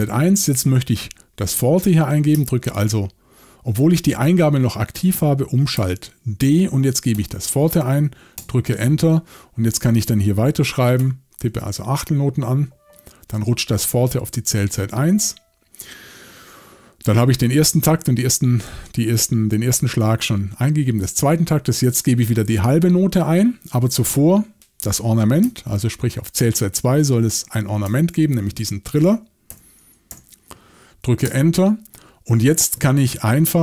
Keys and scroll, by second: 5.8 shift+d, 7.1 f, 8.4 Return, 11.0 5, 27.9 shift+o, 29.5-30.1 typing, 31.2 Return.